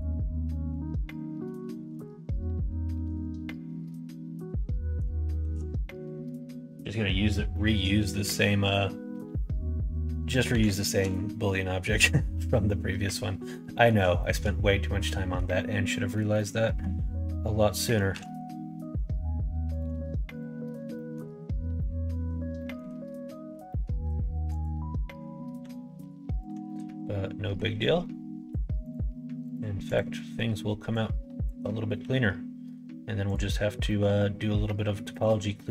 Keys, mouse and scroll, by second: 0.6 f, 0.9 middle click, 1.6 shift+middle click, 2.3 click, 3.1 f, 3.4 middle click, 4.0 middle click, 4.7 middle click, 5.2 middle click, 5.7 middle click, 7.4 middle click, 7.9 shift+middle click, 10.4 l, 13.8 middle click, 14.2 shift+middle click, 16.1 middle click, 18.1 ctrl+e, 20.3 click, 20.9 middle click, 21.7 middle click, 22.5 middle click, 23.6 middle click, 24.5 click, 25.6 s, 26.6 middle click, 27.8 click, 28.8 click, 29.4 click, 29.9 click, 30.9 click, 31.9 s, 33.8 middle click, 35.2 click, 35.6 middle click.